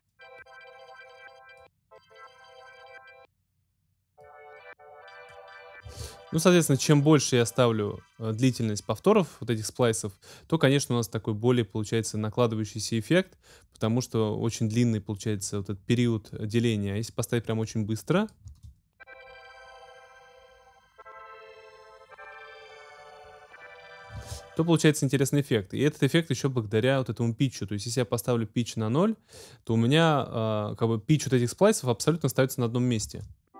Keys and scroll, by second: 5.8 space, 18.4 space, 24.2 space, 33.0 space.